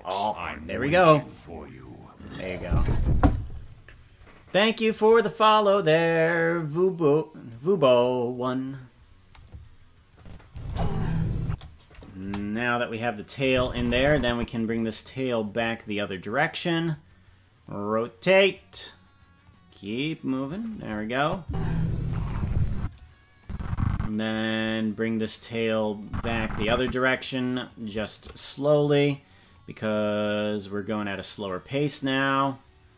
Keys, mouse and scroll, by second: 10.2 click, 10.4 space, 12.2 space, 12.2 KP_0, 13.4 click, 15.7-16.8 drag, 17.6-18.7 drag, 19.4-20.7 drag, 21.2 click, 21.4 space, 23.4 click, 23.4 space, 26.0 click, 27.6-29.5 drag, 30.2-32.0 drag.